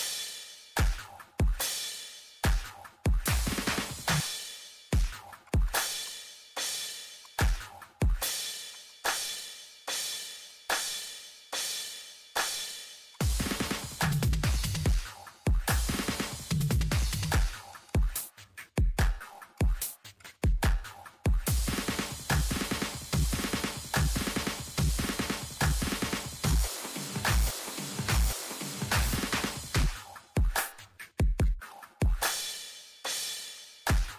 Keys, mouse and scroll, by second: 0.0 middle click, 0.8 click, 0.9 middle click, 1.2 scroll up 1, 1.5 click, 1.7 middle click, 3.3 click, 3.6 ctrl+middle click, 3.8 click, 3.9 middle click, 3.9 scroll up 1, 4.2 click, 4.6 right click, 5.0 click, 5.6 click, 6.5 right click, 6.8 click, 8.3 typing, 8.5 Return, 8.7 click, 9.3 middle click, 9.9 click, 10.6 middle click, 11.0 click, 11.2 middle click, 11.9 middle click, 12.4 click, 12.7 middle click, 13.1 click, 13.7-14.2 scroll down 2, 13.9 click, 14.2 click, 15.0 click, 15.7 click, 16.9 7, 17.0 Return, 17.2 click, 18.0 middle click, 18.1 click, 18.4 scroll down 1, 18.6 click, 18.7 Delete, 19.1 Return, 19.4 click, 20.0 middle click, 20.2 click, 20.5 middle click, 21.1 click, 21.2 middle click, 21.7 click, 22.1 ctrl+middle click, 22.6 click, 23.0 middle click, 23.2-23.7 scroll up 2, 23.4 middle click, 23.7 ctrl+middle click, 23.9 scroll down 1, 24.3 click, 25.9-26.5 scroll down 1, 26.5 scroll down 1, 27.0 click, 29.3-29.7 scroll, 29.6 click, 30.1 click, 30.4-30.9 scroll, 30.6 click, 31.7 click, 32.6 click, 33.2-33.5 scroll up 1, 33.5 click.